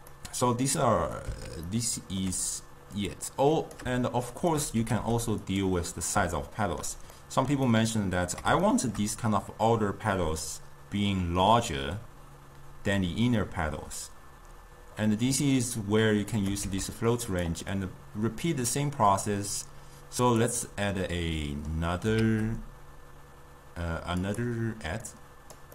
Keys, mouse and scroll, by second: 3.1-4.6 drag, 4.9 g, 6.5-11.8 shift+middle drag, 16.5 click, 16.8 shift+d, 19.8 drag, 20.8-22.3 middle drag, 22.3 shift+d, 25.2 click.